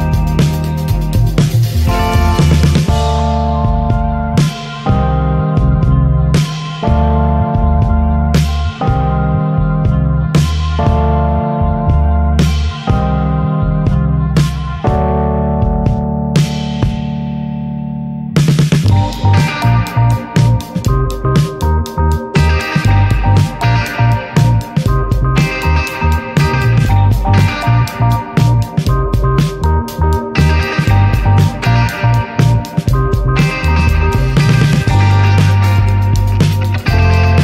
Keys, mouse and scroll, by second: 0.3-1.3 shift+middle drag, 1.3 click, 2.7-5.7 middle drag, 3.1 ctrl+s, 5.0-6.4 drag, 6.4 shift+middle click, 7.1 scroll down 2, 7.8 scroll up 2, 8.6 scroll up 1, 9.6-12.2 drag, 12.2-13.7 scroll down 4, 12.4 middle click, 14.4 click, 17.5-18.8 drag, 20.1-22.4 scroll down 3, 23.9-28.8 middle drag, 28.8 click, 30.5-31.1 drag, 31.6 scroll down 2, 32.1-34.1 alt+middle drag, 34.1 click, 34.8 shift+d, 36.0 click.